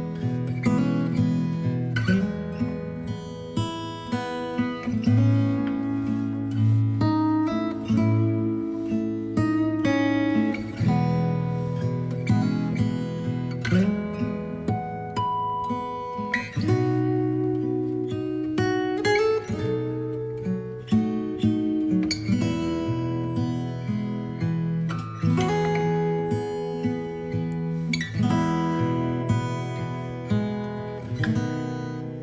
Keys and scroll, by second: 23.8 space, 30.5 ctrl+z.